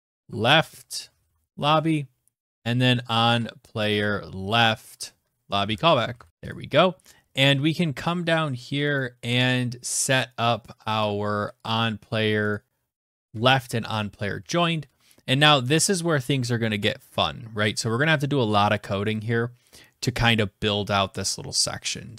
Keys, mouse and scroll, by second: 0.0-0.7 typing, 2.3 click, 3.9 click, 4.4-5.8 typing, 6.3 click, 6.4-8.0 scroll, 8.0 click, 8.0-8.9 scroll, 9.1 click, 10.0 click, 10.7 click, 11.5 click, 12.3 Return, 12.6 Tab, 13.5 Return, 13.8 Tab.